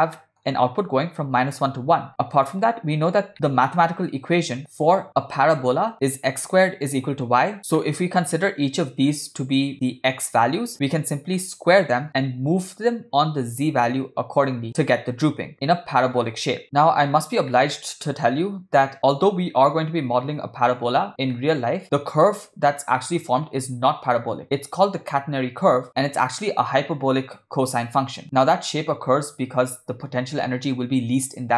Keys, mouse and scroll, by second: 0.2 middle click, 2.1-2.5 drag, 3.3 ctrl+middle click, 7.8-8.2 middle drag, 15.5 shift+a, 17.6 middle click, 21.3-21.8 middle drag.